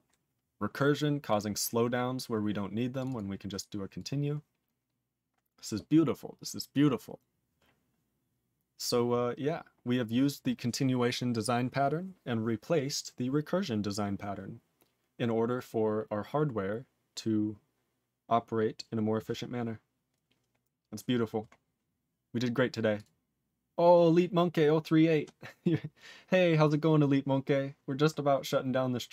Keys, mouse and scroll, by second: 1.2 click, 1.3 click, 1.8 scroll down 2, 2.9 click, 3.0 click, 3.0 double click, 3.1 double click, 3.9 click, 4.0 click, 7.9-8.3 scroll down 1, 8.3 scroll up 5, 9.7-14.8 scroll up 2, 21.5-22.9 scroll down 16, 22.9 click, 23.0 click, 23.4-24.0 scroll down 1.